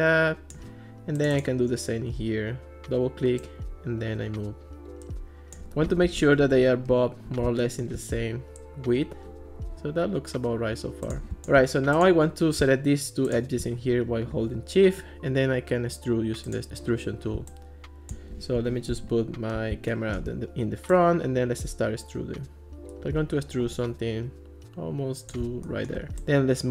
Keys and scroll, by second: 6.1 alt+r, 18.6 alt+r.